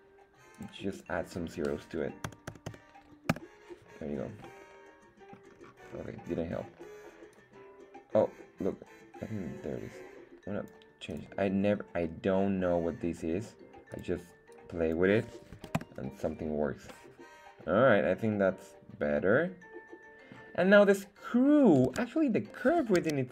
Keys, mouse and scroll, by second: 2.4 KP_0, 4.4-5.4 middle drag, 5.6-6.4 scroll down 2, 6.4-7.4 scroll up 3, 7.4-10.7 drag, 11.1-16.5 drag, 16.9-20.5 middle drag, 21.9 Tab, 23.0 z.